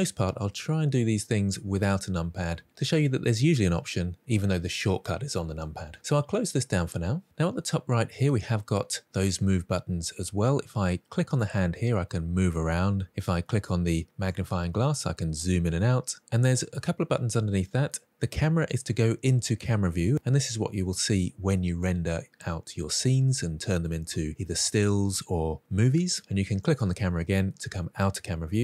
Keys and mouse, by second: 14.2 click, 18.7 click, 26.5 click.